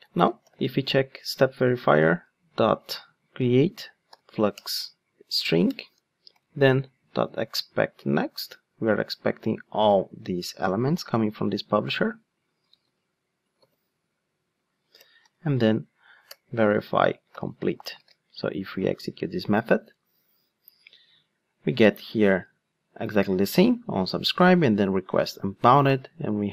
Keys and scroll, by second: 1.3 Return, 12.8 super+c, 13.6 super+v, 16.2 Return, 17.9 ctrl+shift+d.